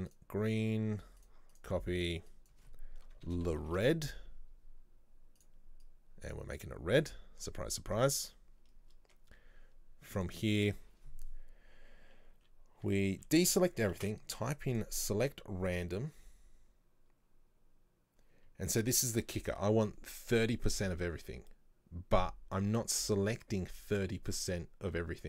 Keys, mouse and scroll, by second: 1.6-4.6 drag, 5.5 click, 9.0-9.4 scroll down 1, 9.4-10.3 scroll up 1, 10.3 click, 12.5 a, 12.9 a, 14.1 space.